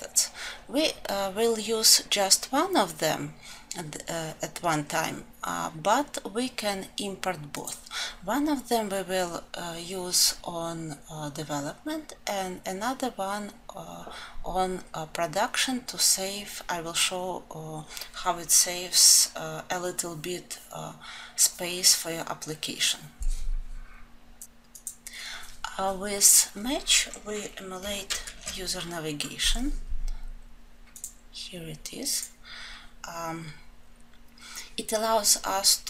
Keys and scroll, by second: 28.1 ctrl+alt+7.